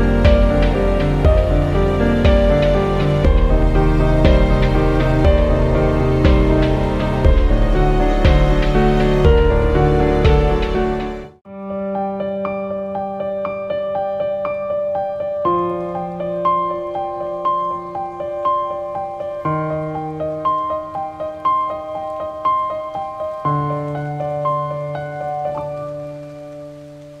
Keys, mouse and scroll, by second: 0.2 click, 3.9 click, 6.7 click, 9.9-23.9 drag.